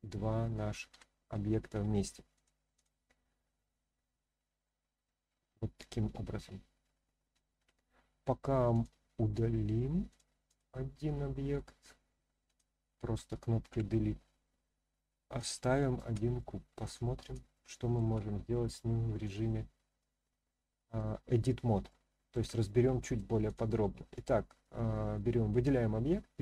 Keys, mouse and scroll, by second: 0.9 g, 1.7 z, 2.3 click, 2.7 click, 3.4-4.6 middle drag, 6.1 ctrl+z, 6.5 ctrl+z, 7.6 ctrl+z, 8.7-10.1 drag, 10.4 click, 10.9-11.5 middle drag, 12.4 click, 13.7 Delete, 14.2-14.6 scroll down 1, 14.6-15.4 scroll up 1, 15.5 shift+scroll up 1, 15.5-16.0 shift+middle drag, 16.8 click, 17.5-17.9 shift+middle drag, 19.3 click, 20.5-21.0 middle drag, 21.9-22.3 shift+middle drag, 22.6-23.2 middle drag, 23.4 click.